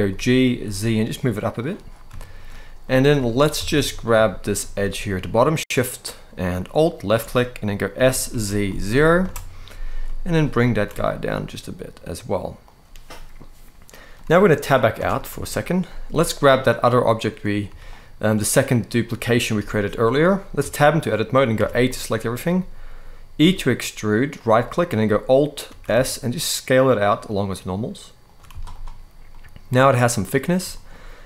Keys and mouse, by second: 0.2 z, 1.3 click, 1.9 shift+middle click, 2.6 middle click, 3.0 shift+middle click, 3.3 alt+a, 3.5 middle click, 4.0 shift+middle click, 6.4 alt+shift+click, 7.6 s, 8.0 z, 8.4 0, 8.9 Return, 9.7 middle click, 10.3 g, 10.6 z, 12.3 click, 13.8 middle click, 14.6 Tab, 15.1 shift+middle drag, 15.6 middle click, 16.2 click, 16.7 click, 17.4 z, 18.3 click, 19.2 g, 19.9 right click, 20.3 Tab, 21.3 a, 21.5 middle click, 23.1 e, 25.3 alt+s, 27.9 shift+click, 28.2 z, 29.0-30.1 middle drag, 30.4 shift+middle click.